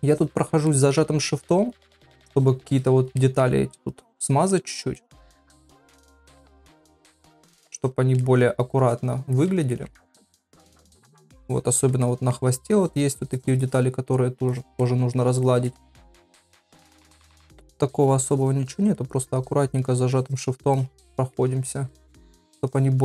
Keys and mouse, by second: 0.1 shift+click, 0.4 shift+click, 0.7 middle click, 1.4 shift+click, 2.2 shift+click, 2.4 shift+click, 2.7 shift+click, 3.2 middle click, 3.9 shift+click, 5.0 shift+middle click, 5.7 shift+click, 6.2 middle click, 6.8 shift+click, 7.0 shift+click, 7.8 shift+click, 8.2 middle click, 8.8 shift+click, 9.3 shift+click, 9.7 ctrl+middle click, 10.0 shift+middle click, 10.6 ctrl+middle click, 11.5 shift+click, 11.7 shift+click, 12.0 middle click, 12.8 shift+click, 13.3 shift+click, 13.7 shift+click, 14.5 shift+click, 14.8 middle click, 15.4 shift+middle click, 15.9 ctrl+middle click, 16.2 shift+middle click, 16.7 middle click, 17.1 ctrl+middle click, 17.4 shift+middle click, 18.0 shift+click, 18.8 shift+click, 19.4 shift+click, 19.7 shift+click, 20.1 shift+click, 20.7 shift+click, 21.1 shift+middle click, 21.9 shift+click, 22.2 shift+click, 22.7 shift+click.